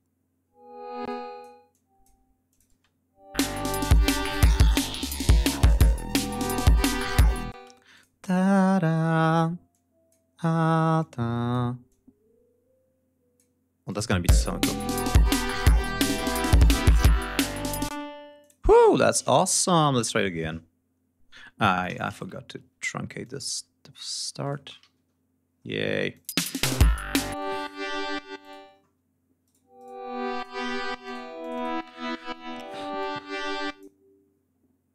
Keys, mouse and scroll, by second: 0.9 click, 0.9 space, 1.5 click, 2.3 click, 2.6 space, 3.2 click, 4.9 ctrl+scroll up 2, 5.5 ctrl+scroll down 2, 6.6 ctrl+scroll down 2, 6.9 ctrl+scroll up 2, 7.4 ctrl+space, 7.8 ctrl+click, 8.8 click, 9.5 click, 10.8 click, 11.7-13.4 drag, 13.7 click, 14.1 space, 14.8 ctrl+scroll down 2, 16.5 g, 17.8 space, 18.2 click, 18.8 shift+right click, 19.1 shift+click, 19.5 alt+shift+d, 21.5 click, 21.9 shift+right click, 22.3 ctrl+shift+scroll up 2, 23.2 click, 24.3 click, 24.6 alt+d, 24.9 ctrl+alt+scroll down 2, 26.2 space, 27.3 click, 28.3 click, 29.4 right click, 29.7 right click, 30.3 right click, 31.0 click, 31.3 click, 32.9 click.